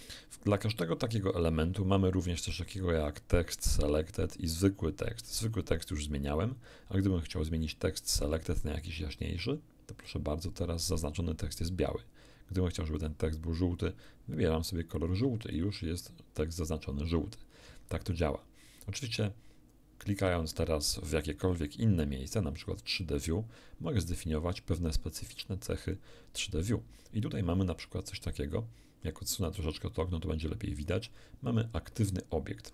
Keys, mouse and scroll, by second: 7.6 click, 8.8-10.2 drag, 13.0 click, 14.0-15.7 drag, 22.9 click, 28.5-31.0 alt+drag.